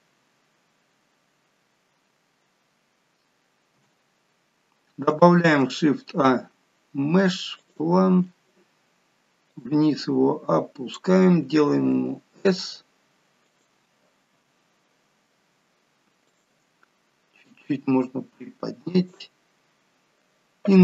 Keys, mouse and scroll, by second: 0.0-0.9 scroll down 3, 0.9 scroll up 3, 1.6 g, 3.9 KP_0, 5.5 shift+a, 9.5 click, 11.9 s, 14.3 s, 17.5 click.